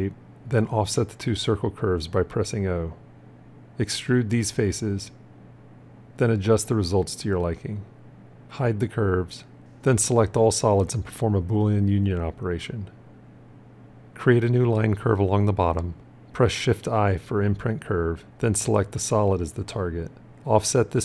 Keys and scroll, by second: 1.2 o, 9.3 h, 11.8 q, 16.4 shift+i.